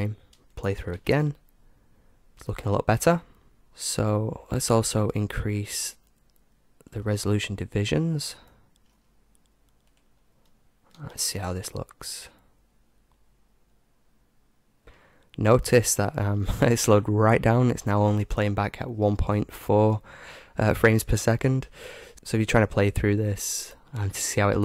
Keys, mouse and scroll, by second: 0.9 alt+a, 3.6-4.7 right drag, 5.0-6.9 middle drag, 6.9-9.4 drag, 9.1 middle click, 9.8-12.0 drag, 11.0 alt+a.